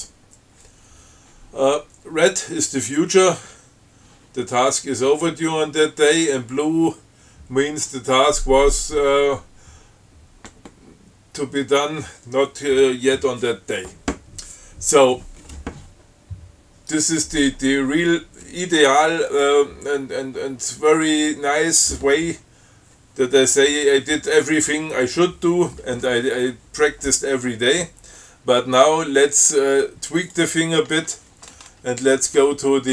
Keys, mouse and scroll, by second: 29.3 scroll down 2, 29.7 scroll up 2, 30.6 click, 31.2 q, 32.1 scroll up 2.